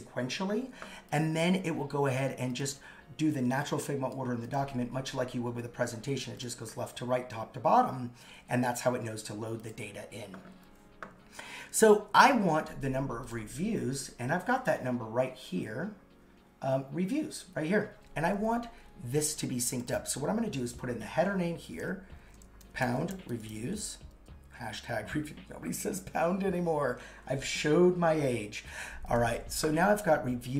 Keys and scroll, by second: 22.2 shift+3, 22.6 shift+r.